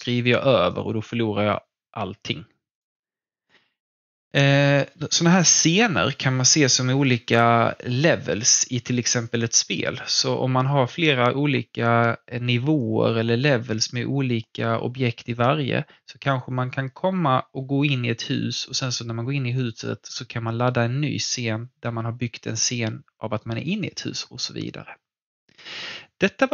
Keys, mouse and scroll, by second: 2.7 click, 25.4 click, 26.2-26.5 scroll down 1.